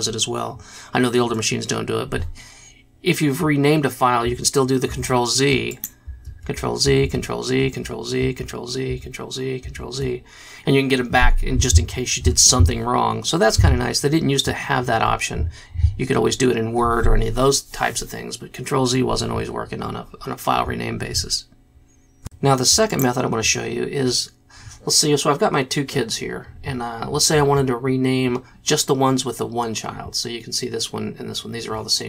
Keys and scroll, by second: 6.3 ctrl+z, 7.0 ctrl+z, 7.6 z, 8.2 z, 8.9 z, 9.6 z.